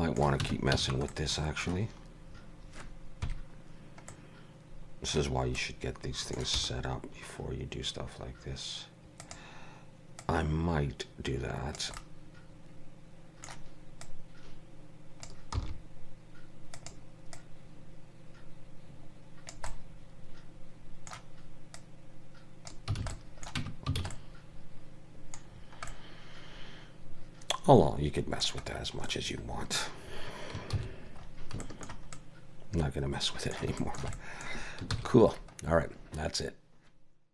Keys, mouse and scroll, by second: 0.5 Tab, 0.8 a, 1.1 middle click, 3.3 KP_3, 4.1 middle click, 5.6 middle click, 6.6 r, 10.2 click, 12.0 middle click, 14.1 click, 15.6 r, 17.4 click, 19.7 middle click, 21.8 click, 23.0 alt+a, 23.1 middle click, 23.6 Tab, 24.0 alt+a, 24.1 middle click, 25.5 scroll down 4, 25.9 middle click, 28.7 scroll down 4, 29.1 middle click, 30.8 shift+c, 31.2 scroll up 3, 31.6 shift+middle click, 32.2 middle click, 33.8 shift+middle click, 34.2 middle click, 35.0 ctrl+s, 35.6 scroll down 1.